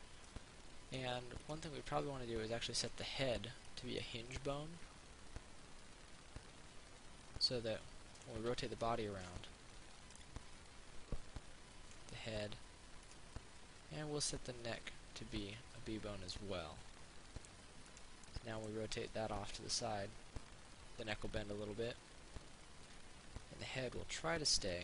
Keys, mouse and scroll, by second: 0.5 middle click, 1.7 right click, 3.0 click, 3.9 right click, 4.2 middle click, 5.0-8.9 drag, 12.4 ctrl+z, 13.3 right click, 14.8 click, 16.6 middle click, 18.1 right click, 18.5 middle click, 19.6-24.8 drag.